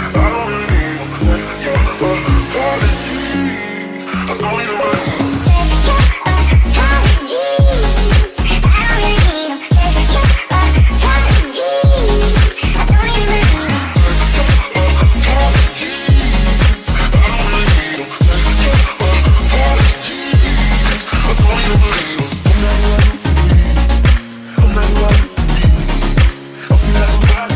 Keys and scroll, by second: 0.0-2.2 typing, 1.9 Delete, 2.7 Delete, 3.4 Delete, 3.9 Delete, 4.0 Delete, 5.1 Delete, 5.4 d, 6.0 Delete, 6.3 Delete.